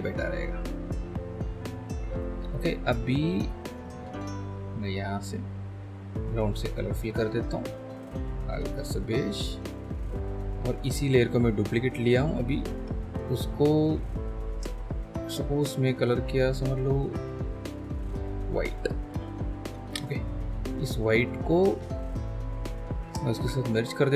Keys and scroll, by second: 23.3 ctrl+shift+e.